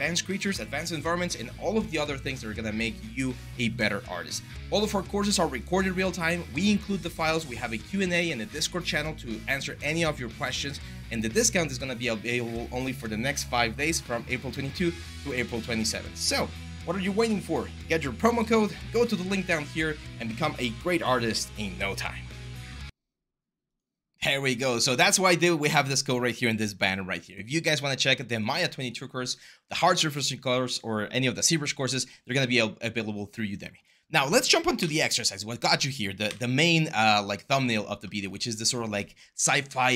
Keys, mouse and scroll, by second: 34.5 Delete, 36.0 Delete.